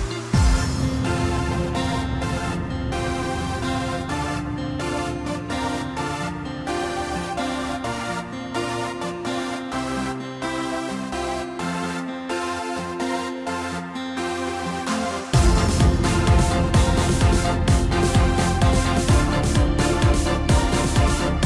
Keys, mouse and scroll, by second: 0.7-1.5 drag, 2.1 click, 11.4-11.9 drag, 12.4-13.0 drag, 13.6 click, 17.9-19.4 scroll up 2, 19.4 KP_3, 20.5-21.3 scroll up 1, 21.3-21.4 scroll down 1.